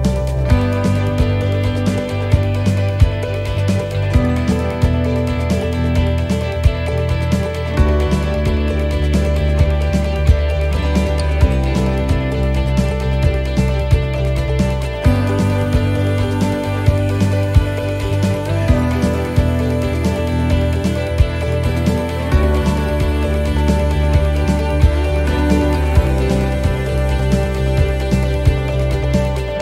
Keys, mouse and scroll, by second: 11.8 click, 19.8 scroll, 21.0 s, 23.1-23.9 scroll, 23.9 click, 27.1 scroll, 29.2 click, 29.5-29.6 scroll down 6.